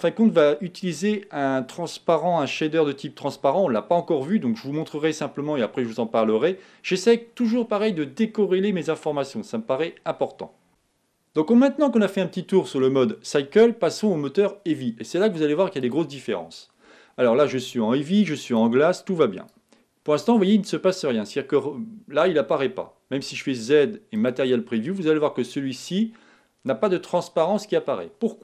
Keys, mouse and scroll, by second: 15.2-24.4 drag, 24.4 z.